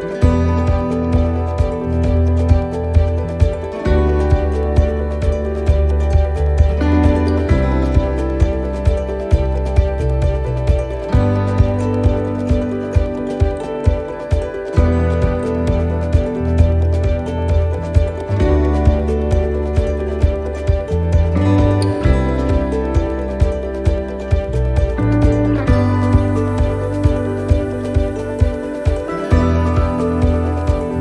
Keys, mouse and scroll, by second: 0.1-0.5 scroll down 2, 0.5 middle click, 0.9-1.3 scroll down 1, 1.3 shift+middle click, 1.9-2.2 scroll up 1, 2.2 middle click, 3.3 shift+middle click, 4.0 middle click, 4.5 shift+middle click, 5.4-6.0 scroll up 7, 6.3 scroll up 1, 13.3 shift+middle click, 13.3 scroll down 4, 13.9-14.3 scroll down 2, 14.3 middle click, 14.8 shift+middle click, 15.3-15.6 scroll down 1, 15.6 middle click, 16.2 shift+middle click, 16.6-17.0 scroll up 2, 17.0 middle click, 18.2 ctrl+r, 21.7 middle click, 22.4 ctrl+r, 25.0 ctrl+r, 27.6 middle click, 30.7 click.